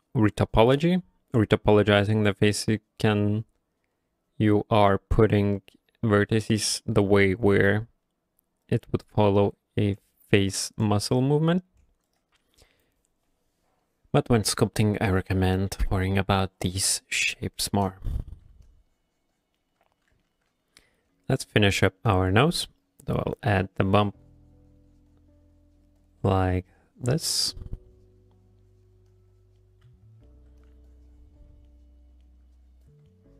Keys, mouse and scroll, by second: 12.1 right click, 17.0 shift+middle click, 17.5 ctrl+middle click, 17.7 middle click, 18.3 middle click, 18.4 shift+middle click, 18.7 shift+click, 19.6 shift+middle click, 19.6 shift+click, 20.2 ctrl+middle click, 20.5 middle click, 20.8 q, 21.9 ctrl+middle click, 22.2 f, 22.6 click, 22.8 click, 23.1 click, 23.3 click, 23.5 click, 23.8 click, 24.0 click, 24.3 click, 24.5 click, 24.7 click, 24.9 click, 25.1 click, 25.6 click, 25.8 click, 26.0 click, 26.2 click, 26.5 click, 26.7 click, 26.9 click, 27.2 click, 27.4 click, 27.6 click, 27.9 click, 28.1 click, 28.6 click, 28.6 click, 28.9 click, 29.1 click, 29.3 click, 29.6 middle click, 29.9 f, 30.3 middle click, 30.6-31.5 shift+click, 31.5 click, 31.7 middle click, 32.3 middle click, 32.6 shift+click, 32.9 shift+click, 33.1 middle click.